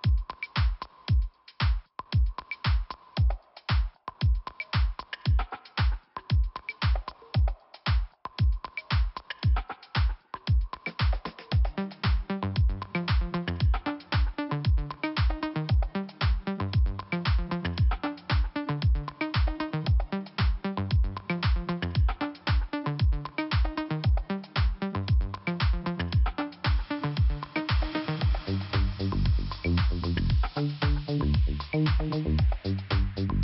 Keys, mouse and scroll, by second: 0.8 click, 2.9 click, 3.1 click, 4.5 click, 4.7 click, 5.5 scroll up 1, 7.3 click, 9.0 click, 9.9 click, 13.7 click, 14.0 click, 15.1 click, 17.3 click, 17.3 click, 18.0 click, 20.9 click, 21.0 click, 21.5 click, 23.6 click, 24.2-24.8 scroll down 1, 25.3 click, 29.4 click, 30.1-30.4 scroll up 2, 31.3 click, 32.9 click.